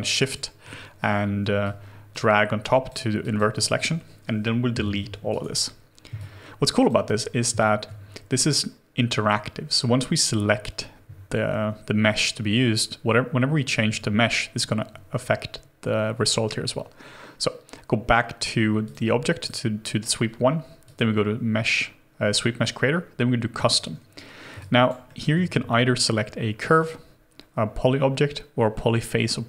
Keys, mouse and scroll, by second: 1.6 shift+click, 2.6 shift+click, 4.7 Delete, 5.3 right click, 6.2 alt+click, 24.6 alt+click, 25.1 alt+middle click.